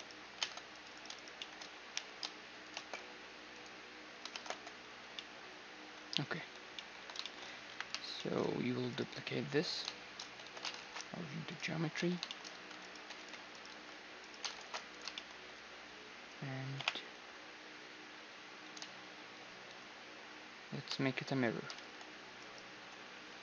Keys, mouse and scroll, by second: 0.0 ctrl+Tab, 1.5 i, 2.4 shift+space, 3.2-5.1 drag, 4.0 shift+space, 4.2 Tab, 4.3-10.1 middle drag, 4.5 a, 6.2 a, 6.8 a, 7.5 KP_1, 8.7-10.5 right drag, 9.0 z, 9.3 z, 9.9 z, 10.1 z, 10.4 ctrl+alt+shift+c, 11.5-13.5 middle drag, 11.9-13.3 typing, 13.2-15.3 right drag, 14.2 ctrl+alt+shift+c, 14.8-16.5 middle drag, 16.5 click, 16.5 ., 16.9 middle click, 19.9-22.0 middle drag, 21.4 shift+d.